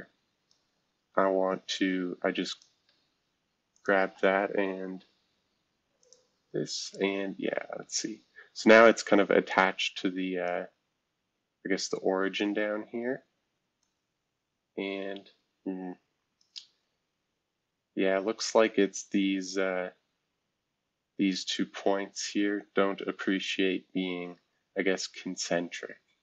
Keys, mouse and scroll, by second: 2.5 click, 3.7 ctrl+click, 6.0 click, 6.8 click, 9.5-10.5 drag, 13.8-16.4 drag, 17.4-18.0 scroll up 2, 18.0-19.0 scroll up 1, 19.3-20.9 scroll up 2, 23.5-24.8 scroll down 3, 24.8-25.5 scroll down 1, 25.6-26.2 scroll up 2.